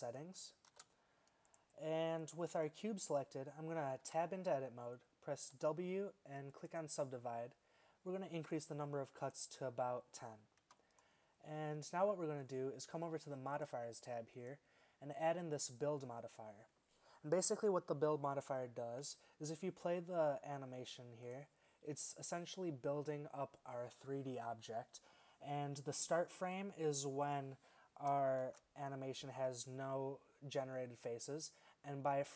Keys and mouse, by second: 0.8 shift+s, 2.3-2.7 right drag, 2.7-3.8 middle drag, 4.1 Tab, 5.6 w, 10.7 Tab, 13.6-16.3 drag, 21.3-23.0 drag, 28.5 shift+Left.